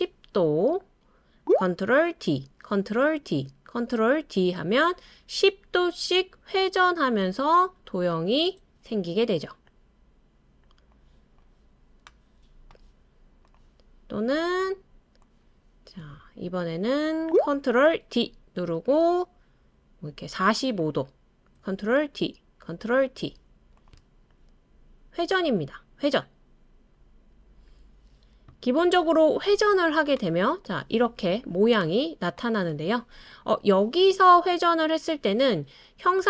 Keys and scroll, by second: 2.2 super+d, 3.2 super+d, 4.2 super+d, 4.6 super+d, 4.9 super+d, 17.2 ctrl+d, 18.0 super+d, 22.0 super+d, 23.0 super+d.